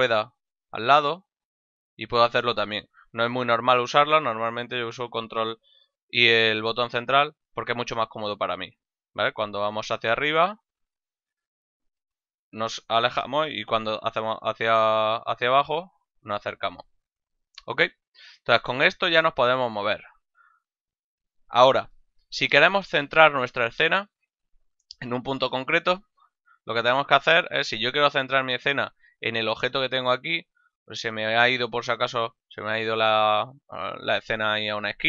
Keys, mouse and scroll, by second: 5.4 ctrl+middle click, 9.9 ctrl+middle click, 11.6 ctrl+middle click, 18.1 middle click, 20.3 ctrl+middle click, 30.3 shift+middle click.